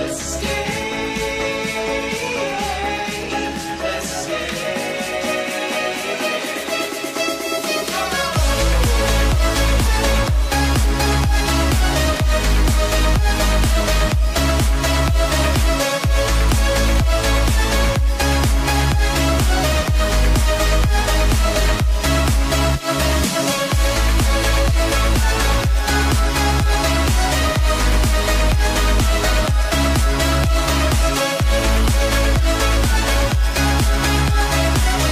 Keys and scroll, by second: 5.1 Tab, 25.6 Tab.